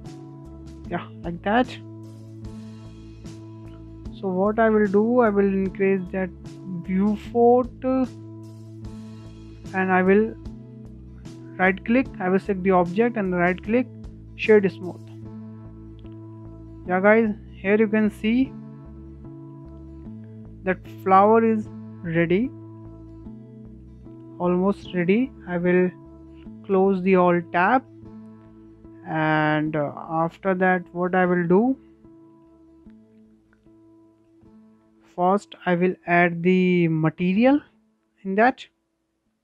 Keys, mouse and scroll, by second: 0.1-1.7 shift+middle drag, 1.7 click, 2.5 click, 3.1 click, 4.6-6.1 drag, 6.1-6.6 shift+middle drag, 6.6 scroll down 3, 6.8-7.2 shift+middle drag, 7.2-7.5 scroll up 2, 7.5-7.9 shift+middle drag, 7.9 scroll up 2, 8.1-9.6 shift+middle drag, 9.6-11.2 right drag, 11.2 click, 12.1-14.4 right drag, 14.4-14.9 scroll down 1, 14.9-15.3 scroll down 4, 15.3-18.8 shift+middle drag, 18.8 scroll up 1, 19.1-19.4 shift+middle drag, 19.4 scroll down 2, 19.6-20.6 middle drag, 20.6-20.9 scroll up 3, 20.9-23.5 shift+middle drag, 23.5 scroll down 2, 23.7-24.9 middle drag, 24.9 click, 25.7 click, 26.4 shift+middle click, 27.1-27.4 scroll up 2, 27.4-29.1 shift+middle drag, 29.1 scroll down 2, 29.4-29.7 shift+middle drag, 29.7-30.0 scroll down 3, 30.0-30.9 shift+middle drag, 30.9-31.4 scroll up 2, 31.4 shift+middle click, 32.1 n, 32.8-33.7 shift+middle drag, 33.7-34.4 scroll up 2, 34.4-37.9 shift+middle drag, 37.9-39.4 scroll down 2.